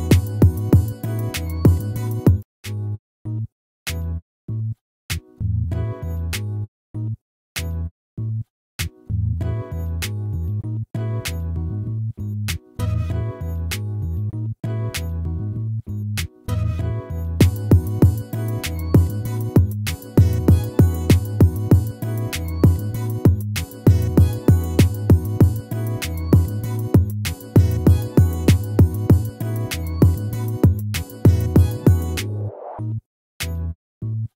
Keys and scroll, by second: 1.8 ctrl+-, 32.3 ctrl++.